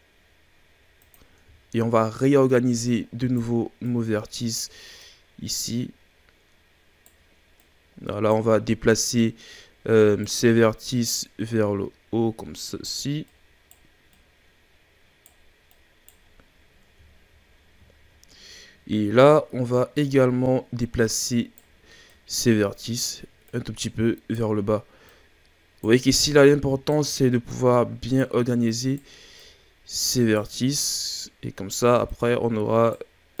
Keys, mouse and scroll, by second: 1.5 shift+scroll down 3, 1.8-2.4 scroll up 3, 2.4 right click, 3.8 right click, 5.0 right click, 7.6 right click, 8.8 right click, 11.0 right click, 13.2 right click, 14.1 right click, 15.6 right click, 16.3-17.1 scroll down 7, 17.1-17.8 shift+scroll up 5, 18.2-19.2 scroll up 2, 19.2 right click, 22.1 right click, 23.4 right click, 25.0 right click, 26.2 right click, 27.5 right click, 28.6 right click, 29.4 right click, 30.9 right click, 32.1 right click.